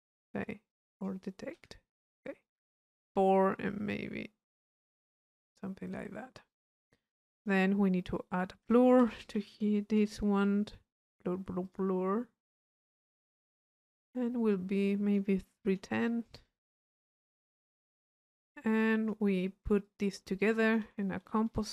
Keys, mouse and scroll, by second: 0.7-1.9 drag, 1.9 middle click, 2.7 click, 3.9-6.7 drag, 6.7-7.8 middle drag, 6.7-7.8 scroll down 1, 7.8-9.9 drag, 10.0 u, 11.7 click, 12.6 click, 14.9 click, 16.1 click, 18.3 middle click, 18.8 click, 19.9-21.0 drag, 20.6 Tab, 21.0 c.